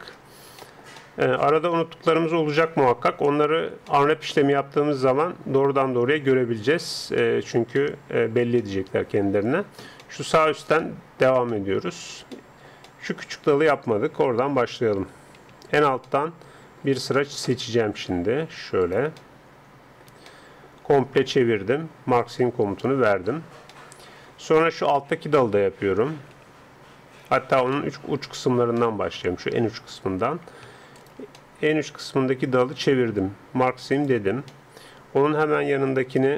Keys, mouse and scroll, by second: 7.2-14.3 middle drag, 14.3 a, 14.5 middle click, 14.7 a, 15.1 a, 15.6-17.3 right drag, 16.0-17.4 middle drag, 17.4 click, 18.4 middle click, 18.9 right click, 19.1 middle click, 19.2 right click, 19.3 middle click, 19.7-20.7 right drag, 20.7-22.2 middle drag, 22.2-24.1 drag, 22.8-24.0 middle drag, 24.1-26.3 middle drag, 26.3 a, 27.4 a, 27.7 middle click, 28.4 a, 31.0-32.9 right drag, 31.6 middle click, 34.0-36.1 drag, 34.9 middle click, 36.1 a.